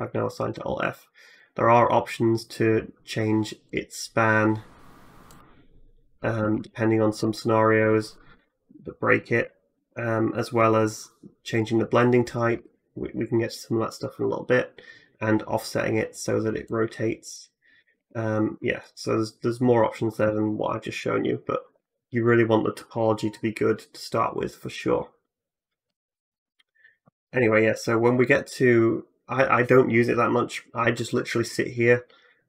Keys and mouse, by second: 1.2-11.5 drag, 6.3 ctrl+z, 9.6 alt+f, 11.5 shift+middle click, 12.1 shift+click, 12.2-15.4 shift+middle drag, 15.4-32.4 drag, 17.8 ctrl+z, 28.7 middle click, 28.7 right click.